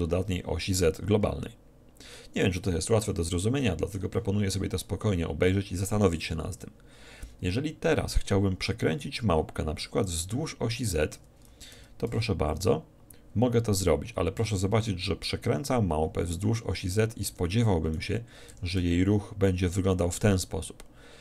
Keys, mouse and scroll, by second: 2.7-4.5 middle drag, 10.1-11.7 right drag, 11.9 r, 18.1-19.9 right drag, 18.8 r.